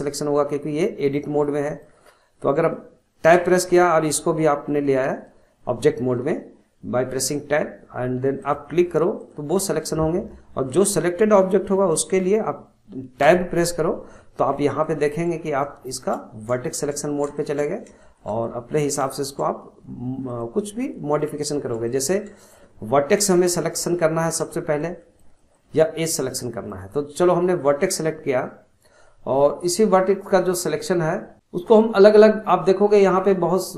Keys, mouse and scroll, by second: 1.2-3.3 shift+middle drag, 3.3 Tab, 8.4 click, 9.2 click, 13.2 Tab, 14.8 shift+middle click, 15.4-15.8 scroll up 1, 15.8-17.7 shift+middle drag, 17.7-18.0 scroll up 2, 18.0-20.3 shift+middle drag, 20.3 click, 20.8-23.9 middle drag, 23.9-24.6 scroll up 1, 24.6-29.6 shift+middle drag, 31.3-33.3 drag.